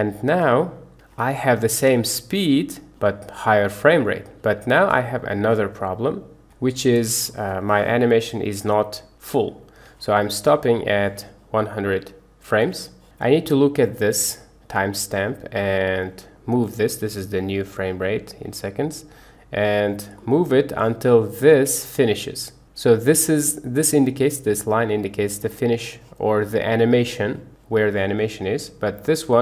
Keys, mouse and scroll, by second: 0.3 space, 1.0 Escape, 1.7 space, 4.4 Escape, 5.3 space, 6.4 Escape, 7.3 space, 9.9 Escape, 10.8-13.1 drag, 15.7 click, 16.9-19.7 drag, 20.3 middle click, 28.9-29.4 drag.